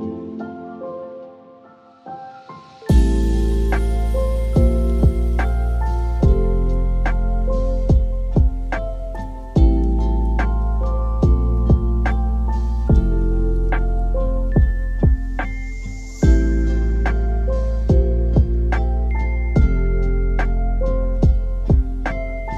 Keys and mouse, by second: 0.0 click, 0.3 Delete, 1.0 click, 2.2 click, 2.9 click, 3.2 Delete, 3.6-4.0 drag, 4.4 click, 4.6 Delete, 4.9 click, 5.3 Delete, 5.8-6.8 drag, 7.4 click, 8.3 click, 8.8 click, 8.9 Delete, 9.6 middle click, 10.3-10.8 drag, 11.2-11.5 drag, 11.8 middle click, 12.5-12.8 drag, 13.1 middle click, 13.7 click, 14.1 middle click, 14.3 shift+a, 15.2 p, 16.3 shift+a, 19.7 middle click, 20.6-21.1 drag, 21.5 click, 22.4 click.